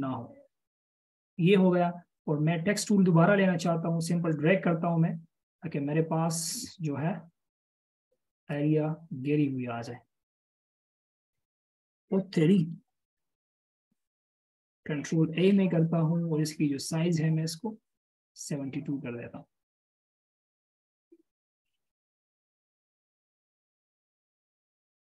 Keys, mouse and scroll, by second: 13.5-14.0 alt+shift+scroll up 1, 15.6 ctrl+a, 24.5-25.0 alt+shift+scroll down 1.